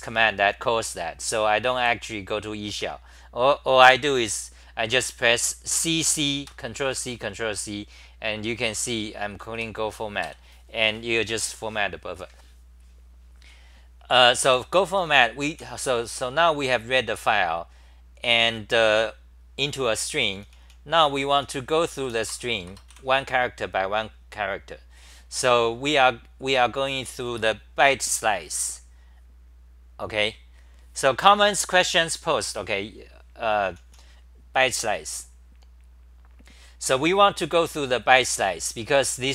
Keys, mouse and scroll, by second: 1.8 f, 6.0 ctrl+c, 14.3-15.6 typing, 20.3-22.9 typing, 22.3 Return, 22.4 Return, 22.6 Return, 25.7-30.1 scroll down 5, 30.9-33.4 scroll down 1, 33.7 scroll down 4, 33.7 t, 33.8 t, 38.4-39.3 typing.